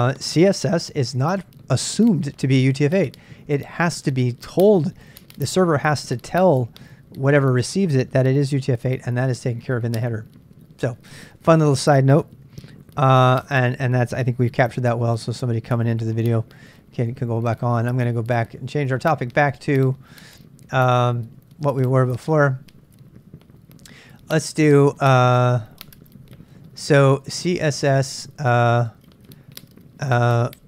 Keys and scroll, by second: 8.6 ctrl+a, 8.7 ctrl+a, 14.4-15.2 typing, 15.8 Return, 17.1 ctrl+[, 17.2-20.1 typing, 21.3 n, 22.7-28.8 typing.